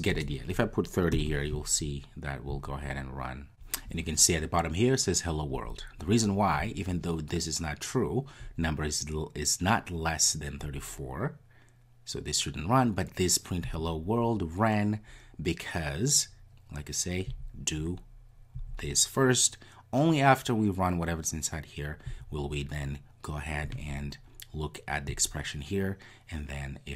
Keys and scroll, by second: 2.6 ctrl+r.